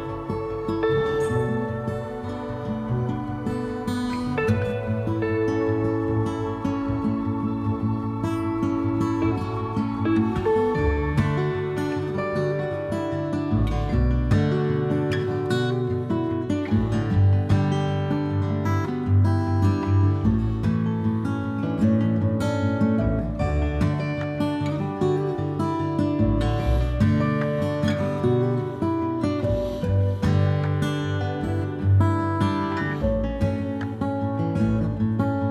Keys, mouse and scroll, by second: 0.0-1.6 middle drag, 1.2 a, 1.6-8.1 drag, 4.7 a, 5.4 a, 6.5 Tab, 8.1-10.6 middle drag, 9.1 n, 10.6 click, 10.8-12.2 middle drag, 12.2-17.9 drag, 15.9 ctrl+z, 17.9-27.2 middle drag, 24.8 a, 27.3-35.5 shift+middle drag, 27.8 shift+n, 29.6 z, 31.6 z, 32.8 Tab, 33.7 a, 33.8 a, 34.2 a.